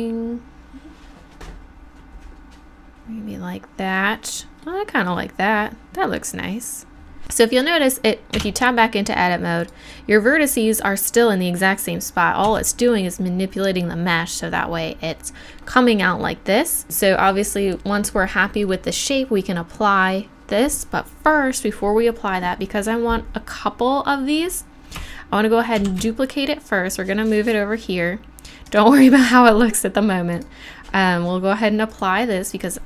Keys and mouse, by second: 8.5 Tab, 9.6-11.4 right drag, 12.5 Tab, 25.9 shift+d, 31.0 right click, 31.9 click, 32.3-32.8 drag.